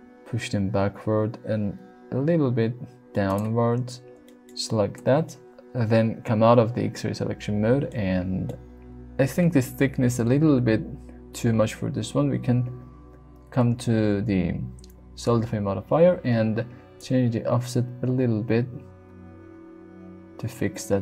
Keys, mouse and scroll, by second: 3.3 click, 4.2 shift+middle click, 5.0 Tab, 5.2-5.6 middle drag, 7.9-8.4 middle drag, 17.1-21.0 shift+drag.